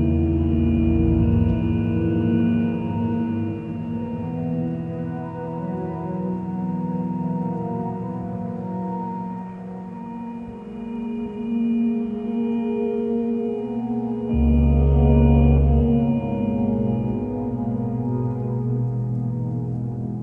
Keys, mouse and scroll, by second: 2.4 ctrl+space, 3.2 click.